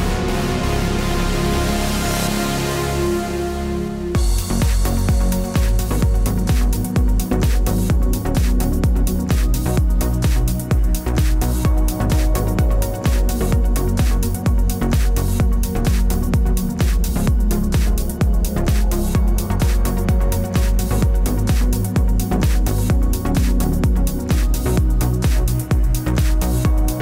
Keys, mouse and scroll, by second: 0.3 click, 2.5 shift+d, 3.8 click, 4.7 click, 6.2 middle click, 6.7 scroll up 4, 7.0 shift+middle click, 8.0 scroll down 1, 8.2-8.7 scroll up 1, 8.9 shift+middle click, 10.7 ctrl+alt+KP_0, 11.6 click, 12.4 g, 14.1-15.1 scroll down 7, 14.3 middle click, 15.1 click, 15.7 click, 16.8 click, 18.1 click, 19.0 scroll up 5, 19.2 scroll down 1, 20.0 click, 21.7 click, 22.5 click.